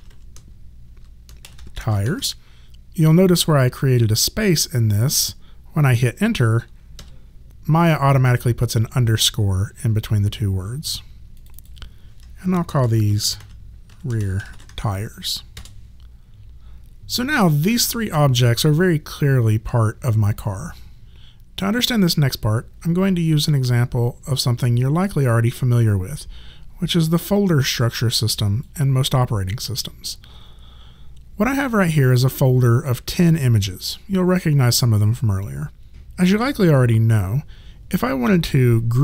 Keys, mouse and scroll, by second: 0.0-2.5 typing, 7.0 Return, 11.4 click, 12.6-15.1 typing, 15.6 Return, 15.6 KP_Enter, 17.4 click, 21.3 click, 27.1 click.